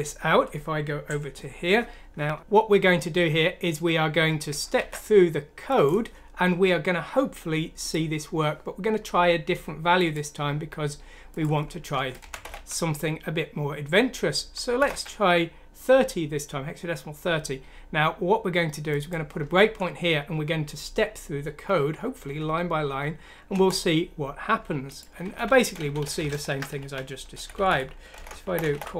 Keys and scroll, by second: 2.3 ctrl+z, 12.2-12.5 typing, 14.8 typing, 22.2 F9, 23.5 Return, 25.0-28.9 typing.